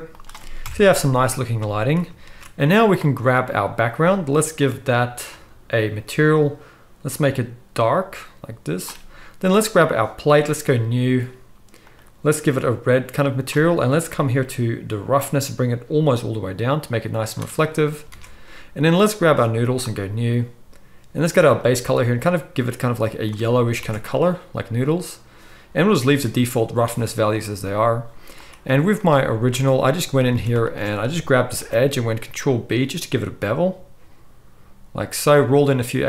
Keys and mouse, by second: 0.6 KP_0, 1.6-2.2 middle drag, 2.2 ctrl+s, 2.6-3.2 middle drag, 3.2 click, 3.3-4.6 middle drag, 4.6 click, 4.7-5.3 middle drag, 5.3-6.4 drag, 6.4-9.4 middle drag, 9.4 click, 9.5-10.6 middle drag, 10.6-11.9 drag, 11.9-15.2 middle drag, 15.2-19.0 drag, 18.1 alt+a, 19.0 middle click, 19.9-21.5 drag, 21.5-28.4 middle drag, 23.8 alt+a, 28.4 click, 28.7 z, 29.6 Tab, 30.1 middle click, 30.3 alt+a, 31.7 ctrl+b, 31.7-36.0 ctrl+middle drag.